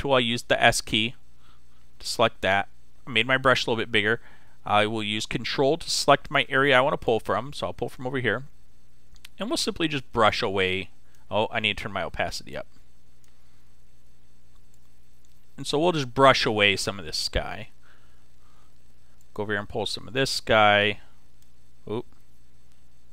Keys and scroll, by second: 22.3 z.